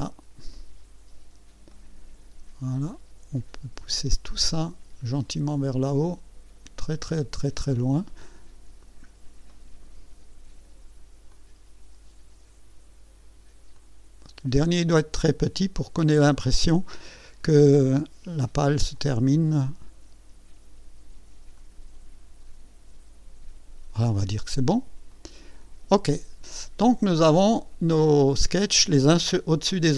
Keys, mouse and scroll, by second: 0.5 right click, 1.2 scroll up 1, 1.7 right click, 4.3-8.2 drag, 8.3-9.0 scroll up 2, 9.5 right click, 11.3-12.9 drag, 13.7-16.7 drag, 16.8-17.9 scroll up 3, 18.9-20.2 drag, 21.5-23.9 drag, 25.1 click, 26.9-28.5 drag.